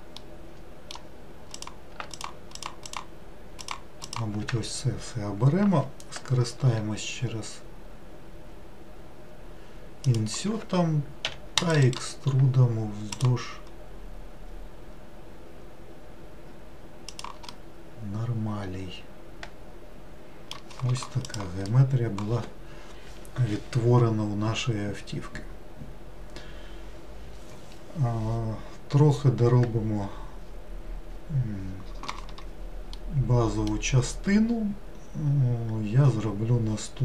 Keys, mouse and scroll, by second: 0.3-1.6 middle drag, 1.6 click, 2.2 shift+click, 2.6 shift+click, 2.9 shift+click, 3.7 shift+click, 4.1 shift+click, 11.3 e, 11.9-15.0 right drag, 17.6-20.6 middle drag, 33.0-36.0 middle drag.